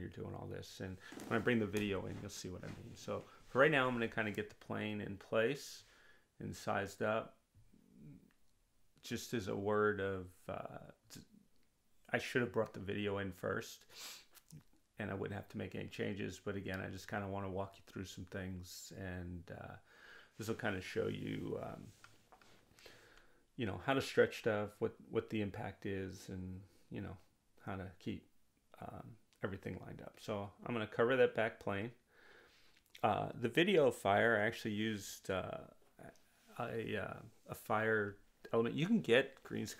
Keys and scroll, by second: 0.0 Return, 7.8 5, 8.1 Return, 26.9 r, 29.5 w, 32.9 r.